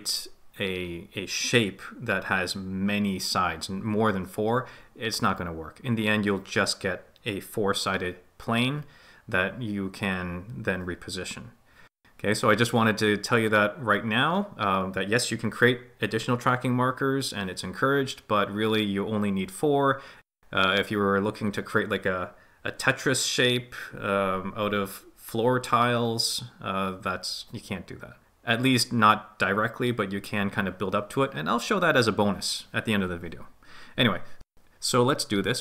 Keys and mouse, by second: 4.3 click, 14.9 ctrl+z, 23.2 right click, 24.0 right click, 25.8-26.8 drag.